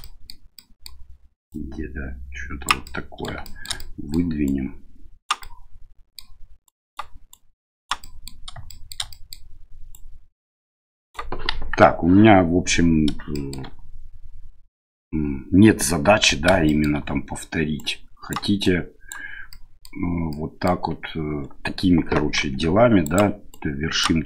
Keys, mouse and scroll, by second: 0.0 middle click, 0.5 middle click, 1.5-2.7 drag, 2.9 middle click, 3.5 shift+middle click, 3.8 middle click, 4.4 right click, 5.4 middle click, 6.6 right click, 7.3 right click, 8.0 middle click, 8.8 shift+middle click, 9.2 middle click, 9.9-11.1 right drag, 11.5 KP_1, 13.4 shift+middle click, 16.7 shift+middle click, 17.8 right click, 18.6 right click, 19.6 middle click, 20.3 middle click, 22.4 g, 23.5 right click.